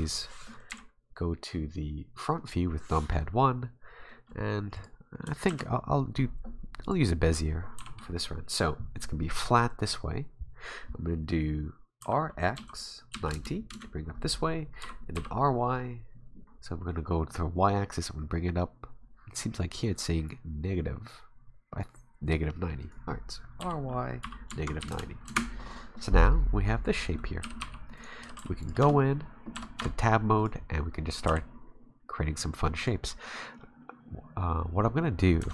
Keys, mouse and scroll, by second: 0.1 s, 0.7 KP_1, 3.8-4.7 scroll up 3, 4.7 click, 5.5 shift+a, 7.8 r, 12.0 r, 14.8 r, 23.6 r, 27.4 g, 28.2 g, 28.8 Tab, 29.5 Tab, 29.8 Tab, 30.4 right click, 30.6-31.2 scroll down 3, 30.9-31.5 scroll up 2, 31.2 g, 33.1 scroll up 2, 35.4 Tab.